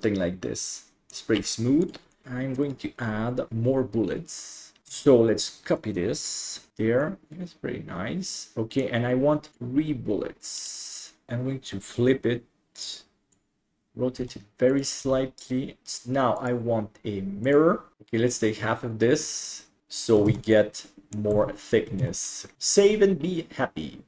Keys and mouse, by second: 1.9 right click, 2.2 middle click, 2.6 right click, 7.1-8.9 middle drag, 10.6 click, 12.8 click, 13.9 r, 14.2 s, 15.0 g, 16.5-17.6 drag, 20.3 alt+z, 20.6 middle click, 21.4 Tab, 22.0 alt+a, 22.3 middle drag, 22.9 ctrl+s.